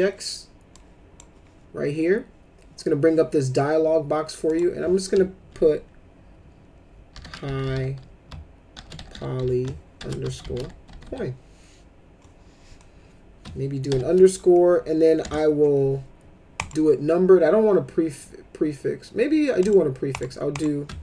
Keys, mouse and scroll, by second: 0.7 click, 4.5 click, 6.9-11.6 typing, 13.6-15.2 typing, 16.5 click, 19.6 click, 20.1 click, 20.5 click.